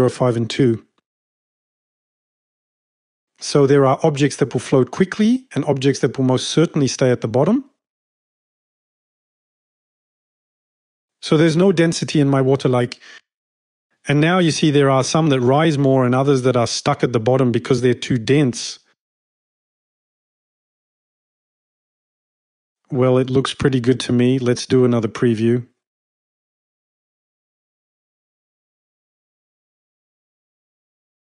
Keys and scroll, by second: 1.6 2, 20.2-21.3 typing, 24.9-25.7 typing.